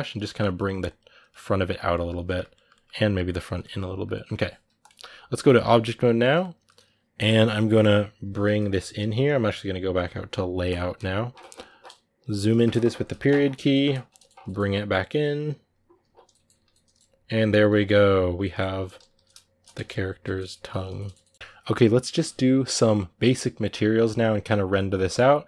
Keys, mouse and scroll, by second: 0.0 middle click, 0.4-1.7 drag, 1.7-2.8 middle drag, 2.8 click, 3.2-5.4 middle drag, 5.4 click, 5.6-8.5 middle drag, 8.5 g, 10.4-12.3 drag, 12.3 KP_Decimal, 13.2 scroll down 1, 13.3 middle click, 14.2 g, 15.2 r, 15.4 g, 16.1 middle click, 16.3 a, 16.4 scroll down 2, 16.5 middle click, 17.1 right click, 17.4 g, 18.2 middle click, 18.5 g, 19.6 Tab, 19.7 scroll down 7, 20.0 Tab, 20.1 middle click, 20.3 a, 20.7 shift+middle click, 21.2 scroll up 1, 21.3 scroll down 3.